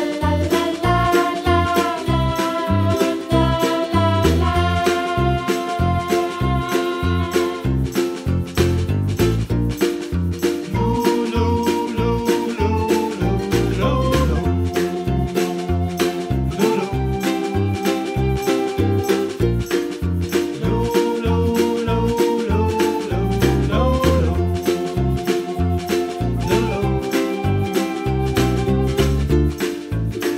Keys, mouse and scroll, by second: 0.1-1.2 scroll down 1, 1.2 click, 3.0 ctrl+z, 3.2-4.4 middle drag, 4.4-5.6 shift+right drag, 8.1-9.3 drag, 9.3-9.8 scroll down 5, 9.8-11.0 middle drag, 12.1 s, 13.8 ctrl+z, 13.9 ctrl+z, 14.3 s, 15.9 click, 16.6-17.8 drag, 18.1 scroll down 4, 18.3 middle click, 18.7-19.0 scroll up 3, 19.0-20.2 middle drag, 20.3 scroll down 5, 20.6-21.6 middle drag, 21.6 click, 22.4 scroll up 4, 22.6 click, 22.8 scroll down 1, 23.0-23.6 scroll up 9, 23.6-24.8 middle drag, 25.8 ctrl+z, 26.0 ctrl+z, 26.3-26.8 scroll down 7, 26.8 s, 27.8 KP_Decimal, 28.0 middle click, 28.1-28.7 scroll down 5, 28.7 s, 30.0-30.3 scroll down 7.